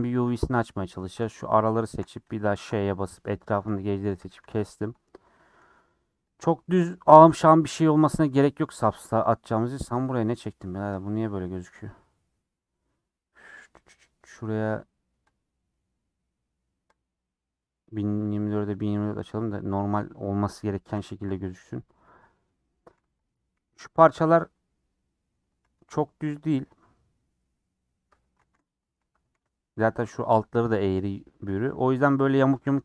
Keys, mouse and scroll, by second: 0.1 3, 3.9 middle click, 4.1 a, 4.4 u, 6.4 click, 6.7 g, 10.9 click, 18.8 middle click, 19.0 scroll up 3, 20.4 middle click, 21.3 u, 22.9 3, 23.1 click, 23.3 g, 24.4 g, 24.8 Up, 24.9 Up, 26.0 click, 27.2 middle click, 28.0 Tab, 28.7 ctrl+a, 29.1 Tab, 29.3 a, 31.6 a.